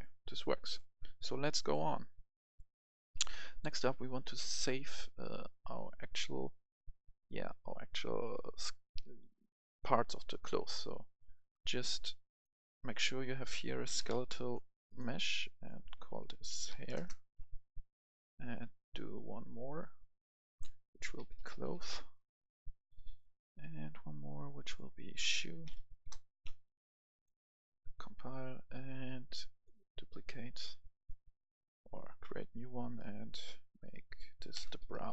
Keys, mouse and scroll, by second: 1.1-1.4 scroll down 1, 1.4 right click, 2.1 scroll down 1, 2.4 right click, 3.0 F11, 3.9-12.0 drag, 13.6-14.1 typing, 14.9 click, 16.5-16.9 typing, 17.0 Return, 18.4 click, 21.2-21.7 typing, 21.8 Return, 23.2 click, 25.3-26.0 typing, 26.1 Return, 27.2 click, 34.6-35.1 typing.